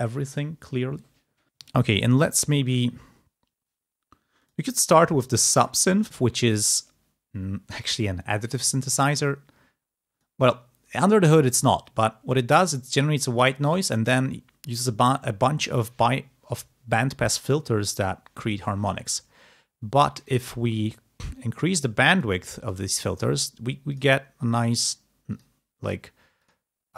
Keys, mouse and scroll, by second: 5.7 click, 9.1-11.1 drag, 12.1-14.3 drag, 21.4 click, 22.5 click, 23.9 click, 24.7 click, 26.2-26.9 drag.